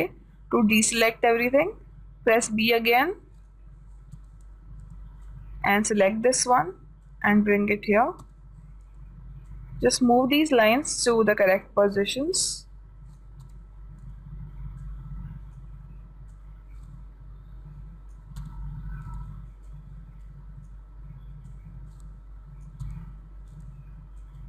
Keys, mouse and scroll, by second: 0.4 a, 2.4 b, 4.6 a, 5.3 b, 7.5-9.2 drag, 8.7 a, 9.4 b, 12.2-13.7 drag, 13.9 a, 14.5 b, 16.8-18.5 drag, 19.1 a, 19.7 b, 21.9-23.9 drag, 23.3 a, 24.0 b.